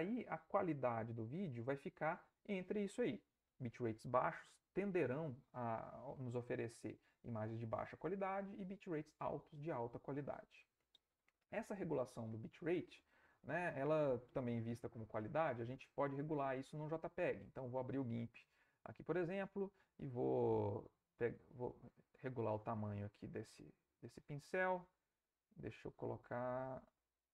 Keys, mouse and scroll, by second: 16.2 alt+Tab, 20.9-22.4 drag, 22.9 click.